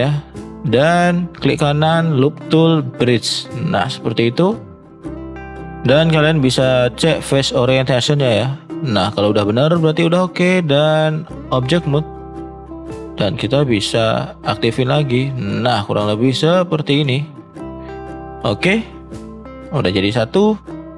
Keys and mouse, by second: 0.2 shift+middle drag, 0.7 middle drag, 1.4-3.0 right drag, 3.6 middle click, 4.6 shift+middle click, 6.8-9.9 drag, 10.2 middle click, 11.3 click, 12.1 middle click, 13.3-15.0 drag, 15.0 middle drag, 15.5 click, 15.9-16.3 middle drag, 17.1 shift+middle drag, 18.2 middle drag, 18.8-19.4 middle drag, 20.2 middle drag.